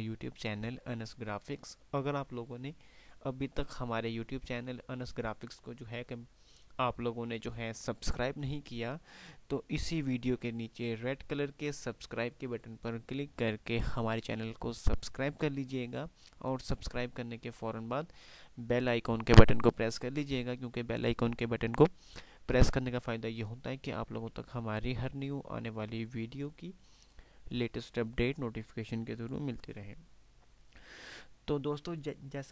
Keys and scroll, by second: 22.1 F5, 22.4 typing.